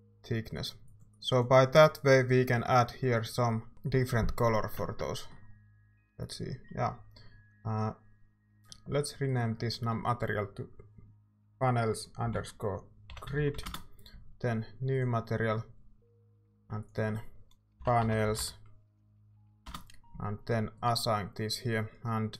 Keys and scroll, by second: 12.3-14.0 typing, 16.1 typing, 17.5-18.9 typing, 19.7 Return.